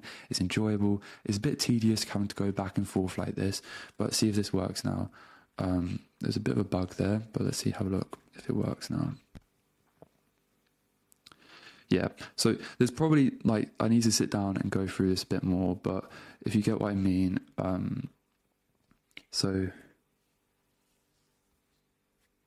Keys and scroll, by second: 3.8 super+space, 4.3 Return, 5.3 super+q, 7.3 super+space, 7.5 a, 7.9 super+space, 8.6 Return, 11.7 super+Tab, 16.8 super+v, 17.2 Return, 17.9 super+Tab.